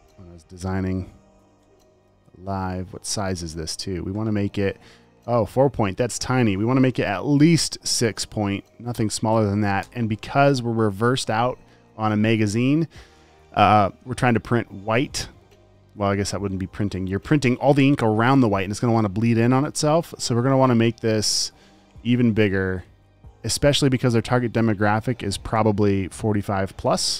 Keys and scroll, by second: 1.4 alt+super+Left, 2.3-3.5 typing, 3.9 super+a, 8.2 6, 22.0 super+a.